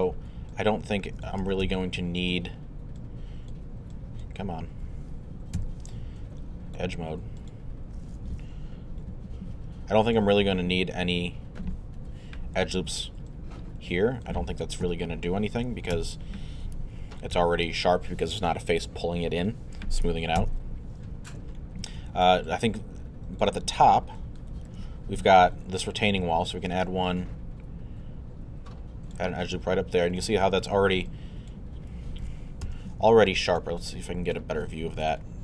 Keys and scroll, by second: 1.4 z, 5.6 q, 12.0 1, 14.8 2, 15.9 z, 17.3 x, 20.4 z, 21.1 alt+z, 32.6 alt+f.